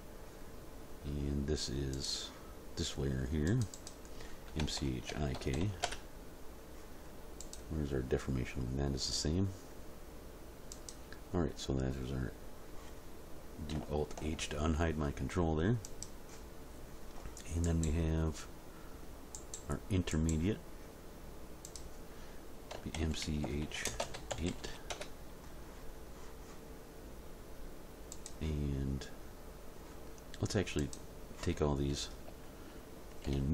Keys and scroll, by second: 4.6 BackSpace, 5.3 shift+i, 5.5 shift+k, 5.9 Return, 14.1 alt+h, 23.0-24.5 typing, 24.9 Return, 31.9 a, 33.3 m.